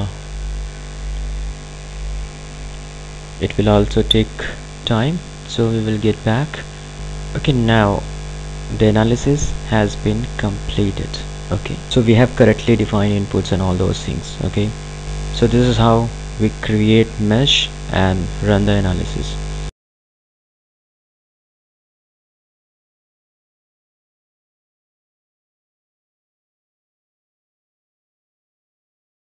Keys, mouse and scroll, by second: 7.0 click, 15.0-18.3 ctrl+alt+drag.